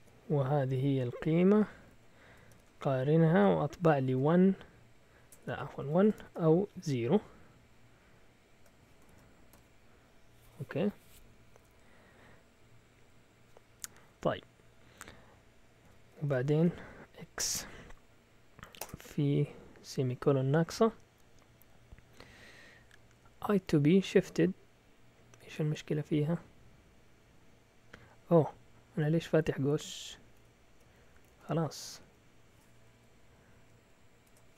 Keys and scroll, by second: 0.0-2.5 typing, 3.7-4.1 typing, 5.3-6.8 typing, 9.0-9.5 typing, 15.8 Escape, 16.2 shift+;, 16.6 x, 17.4 Return, 18.8 Return, 29.6 Up, 30.3 Left, 30.4 Right, 31.2 Left, 31.3 Left, 31.6 Left, 32.0 Down, 32.8 End, 33.8 a, 34.2 BackSpace.